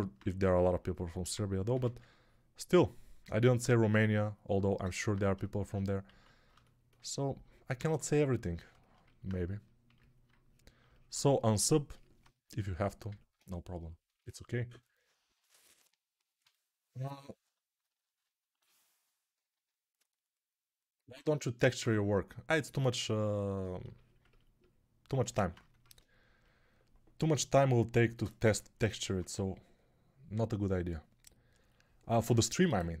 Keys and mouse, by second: 0.2 1, 1.6 x, 6.0 alt+q, 7.7 1, 25.7 ctrl+Tab, 27.6-33.0 middle drag, 28.9 ctrl+Tab.